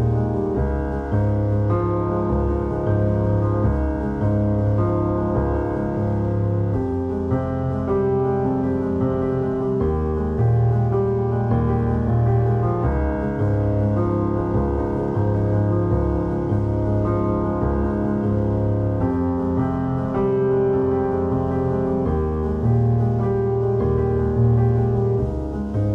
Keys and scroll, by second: 0.3 ctrl+r, 1.2 ctrl+r, 2.8-5.9 typing, 7.1 x, 7.9 Tab, 8.2 x, 8.3 Tab, 9.0 a, 10.3 Tab, 10.5 a, 11.6 a, 15.0 Tab, 17.5 space, 19.0 space, 19.4 c, 19.5 3, 20.8 x, 22.0-24.8 typing, 22.7 ctrl+z.